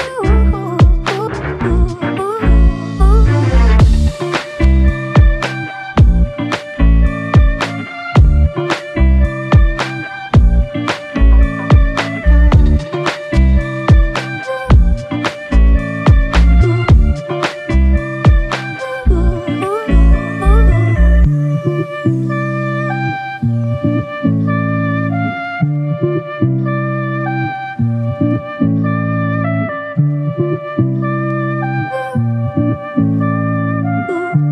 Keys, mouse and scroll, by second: 0.5 right click, 0.8 s, 1.4 right click, 2.1 s, 3.6 Tab, 3.8 s, 4.8 z, 6.6 alt+click, 7.6 q, 11.1 alt+click, 13.9-14.5 alt+scroll down 2, 14.5-16.8 scroll up 1, 20.6 ctrl+Tab, 22.9-23.3 scroll down 1, 23.3-23.7 scroll up 1, 32.2 f.